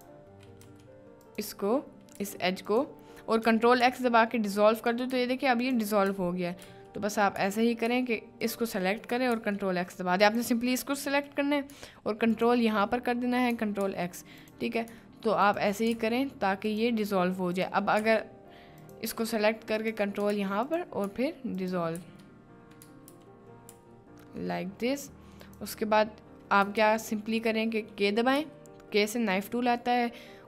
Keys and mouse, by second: 0.6 ctrl+z, 1.2 ctrl+click, 2.1 ctrl+z, 2.6 ctrl+click, 3.9 ctrl+x, 4.8 click, 5.6 ctrl+click, 6.6 ctrl+z, 8.4 ctrl+click, 9.4 ctrl+x, 10.2 click, 13.9 ctrl+x, 14.4-14.8 drag, 16.0 ctrl+x, 17.6 ctrl+click, 18.1 ctrl+x, 18.8 click, 20.4 ctrl+x, 20.6 click, 21.5 ctrl+click, 22.0 ctrl+x, 23.2 ctrl+z, 23.8 ctrl+x, 26.8 ctrl+z, 28.4 k.